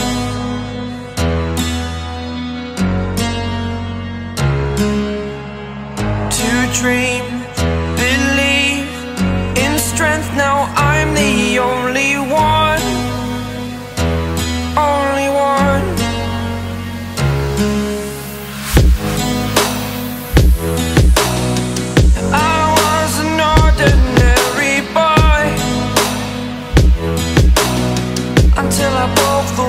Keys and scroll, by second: 22.7 a.